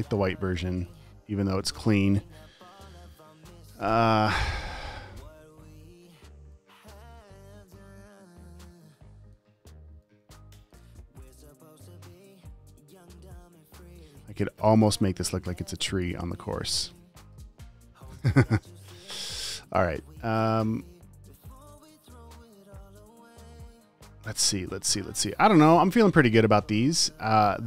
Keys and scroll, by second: 0.5 v, 0.9 space, 6.0 super+t, 7.7 super+z, 13.2 v, 13.9 space, 17.6 super+z, 18.7 super+s, 21.9 space.